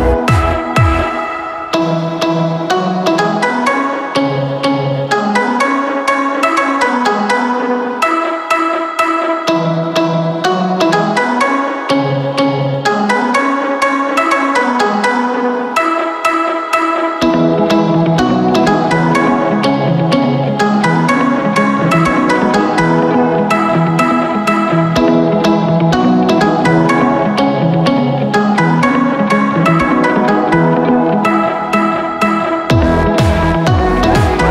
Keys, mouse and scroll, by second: 20.3 KP_0, 20.4 KP_0, 21.5 KP_3, 28.4-28.9 scroll down 2, 28.9 middle click, 29.2-31.1 scroll down 1, 31.4 click, 32.9 click, 33.8 click.